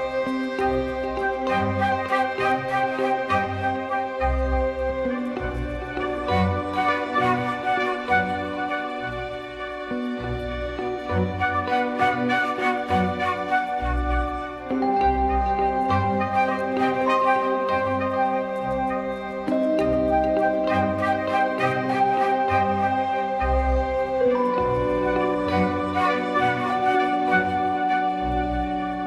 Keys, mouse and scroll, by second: 1.1 click, 1.5 click, 2.7 click, 3.7 middle click, 4.4 click, 5.4 click, 6.6-7.6 drag, 8.7 click, 9.7-11.2 drag, 11.9 Tab, 17.3 ctrl+p, 19.7 shift+click, 20.5 g, 21.5 middle click, 22.2 shift+middle click, 22.5 middle click, 22.8 shift+middle click, 23.1 g, 24.3-24.7 drag, 25.5 shift+drag, 26.3 click, 26.8 g, 28.1 click, 28.5 g.